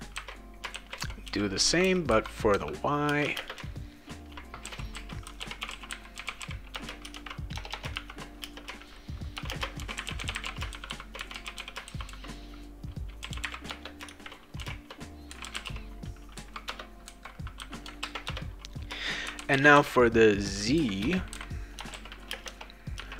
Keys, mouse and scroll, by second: 0.2-3.3 typing, 4.4-16.1 typing, 16.7 Return, 17.6 ;, 18.0 ctrl+s, 18.3 Return, 19.0-20.3 typing, 21.0 Return, 21.3-23.1 typing.